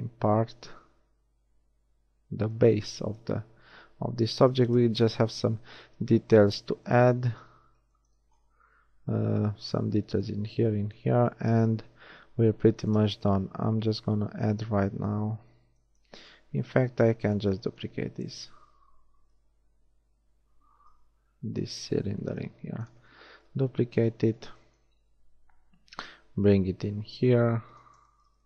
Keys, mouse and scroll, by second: 3.2 KP_1, 4.4 z, 5.6 Tab, 6.7 a, 7.3 z, 8.6 z, 13.5 shift+a, 18.1 a, 18.3 a, 19.3 l, 21.0 l, 22.5 shift+d, 22.9-24.7 drag, 25.9 g.